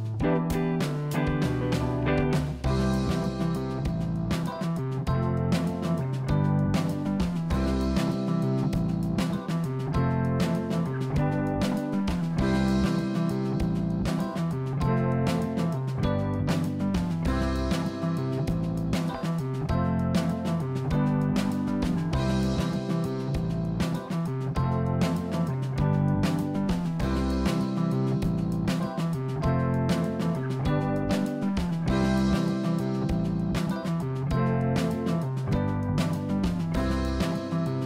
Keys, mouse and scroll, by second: 3.9-5.6 middle drag, 8.3-9.0 scroll up 4, 9.0 click, 9.5-11.2 middle drag, 11.9 click, 12.6 click, 13.0 click, 13.1 click, 14.1 middle click, 14.8 click, 17.1 e, 21.3 middle click, 22.1 scroll down 2, 22.4-24.1 middle drag, 25.6-27.1 middle drag, 27.1-27.5 scroll up 2, 27.5-29.1 middle drag, 29.1 click, 29.4 click, 30.1 scroll down 3, 30.4 middle click, 31.1-31.4 scroll down 3, 31.4-33.0 middle drag, 33.3-34.2 scroll up 3, 34.2 click, 37.2 g.